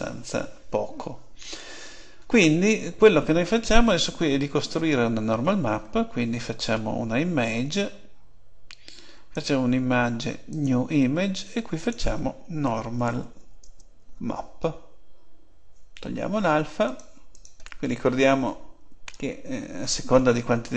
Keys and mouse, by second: 9.3-11.2 drag.